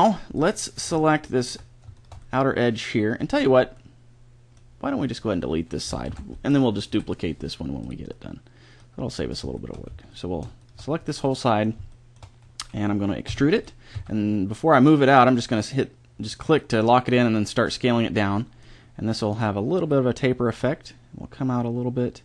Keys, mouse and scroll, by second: 0.3 click, 1.1-3.7 middle drag, 6.1 ctrl+l, 6.9 Delete, 13.3 e, 13.9 s, 16.8-18.5 middle drag, 19.3-21.2 drag, 20.4 e.